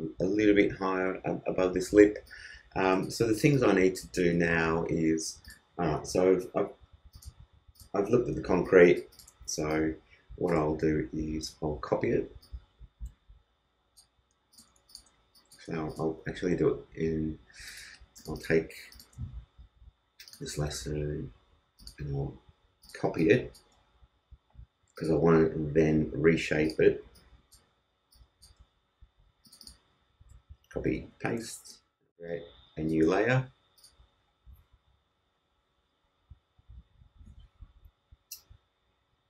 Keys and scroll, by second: 30.7 super+c, 30.9 super+v, 31.4 super+space.